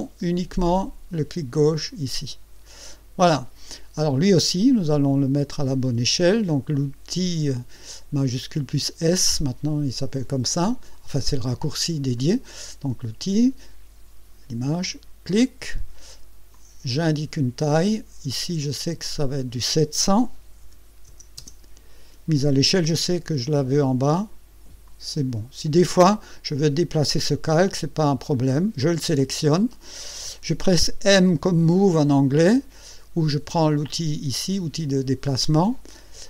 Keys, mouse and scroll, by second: 14.8 click, 16.5-17.9 drag, 19.0 click, 20.6 KP_7, 21.1 KP_0, 24.9 click, 28.8 click, 31.2 m.